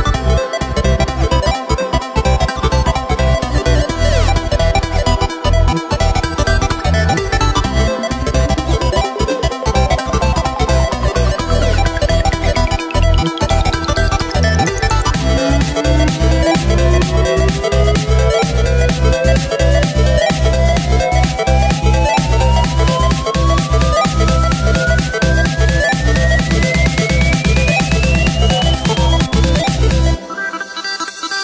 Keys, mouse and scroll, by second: 0.1 Tab, 0.4 scroll down 1, 0.5-1.0 scroll up 1, 1.0 w, 2.1 middle click, 2.3 Tab, 2.6 scroll down 1, 2.6 middle click, 2.9 Tab, 3.4 shift+d, 4.5 s, 6.0 g, 7.2 Tab, 7.6-9.3 middle drag, 9.3 ctrl+KP_1, 9.9 right click, 10.7-12.8 drag, 12.8 3, 13.8 ctrl+KP_Add, 15.0 scroll up 1, 15.1 scroll down 2, 15.5-16.7 middle drag, 16.7 KP_3, 17.9 g, 22.2 ctrl+r, 24.4 Tab, 24.9-25.5 scroll down 2, 25.7 scroll up 2, 26.1 Tab, 26.6 middle click, 27.4-28.3 scroll down 6, 27.6 Tab, 28.3-29.2 middle drag, 29.2 right click, 29.4-29.8 scroll down 1, 29.8-30.3 scroll up 4, 30.3-31.4 middle drag.